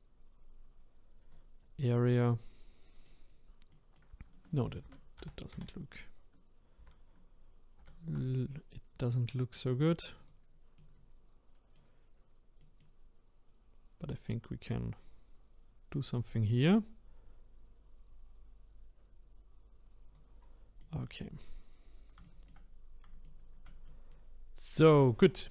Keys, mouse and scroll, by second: 1.6-2.0 scroll down 3, 2.0-3.3 middle drag, 3.3-3.7 scroll up 2, 3.7-4.8 middle drag, 4.8 ctrl+z, 5.2 ctrl+z, 9.5-10.8 drag, 10.8-12.1 middle drag, 12.1-12.6 scroll down 1, 12.6 middle click, 13.5-14.0 scroll up 1, 14.0 click, 14.8 scroll down 1, 15.3-15.9 scroll up 3, 15.9-18.9 drag, 20.4-20.8 scroll down 5, 20.8 middle click, 21.7-22.2 scroll up 1, 22.2-24.8 shift+middle drag, 24.8 click.